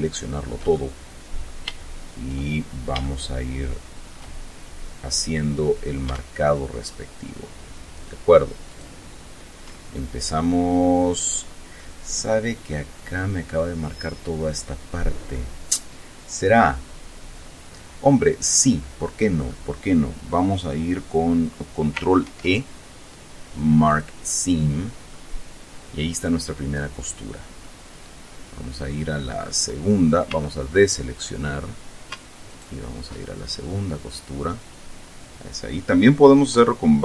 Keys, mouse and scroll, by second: 0.0-1.0 shift+drag, 1.1 shift+click, 2.2 shift+scroll up 1, 2.9 shift+scroll up 3, 3.3-4.6 shift+middle drag, 5.2-5.6 scroll up 2, 9.0 alt+shift+right click, 10.1-10.7 alt+shift+scroll down 3, 10.7-19.9 middle drag, 22.6 ctrl+e, 24.2 click, 25.4-28.1 middle drag, 28.1-28.8 scroll up 2, 29.7-30.2 scroll down 2, 30.6 a, 31.0-31.4 scroll up 2, 32.7 alt+shift+right click, 33.5 alt+shift+scroll down 2.